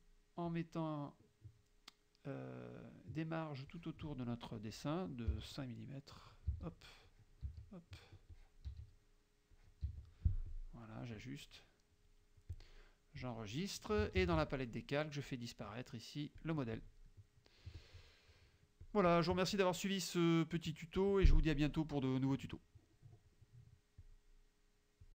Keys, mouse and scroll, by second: 0.6 click, 3.7 click, 5.4 KP_5, 6.2 click, 6.6 KP_5, 7.2 click, 7.5 KP_5, 8.4 click, 8.8 KP_5, 9.6 click, 9.9 KP_5, 10.5 click, 12.0 click, 12.6 click, 13.2 click, 14.2 ctrl+shift+k, 16.5 click, 17.2 middle click, 17.8 click, 18.9 click, 24.1 click, 25.1 click.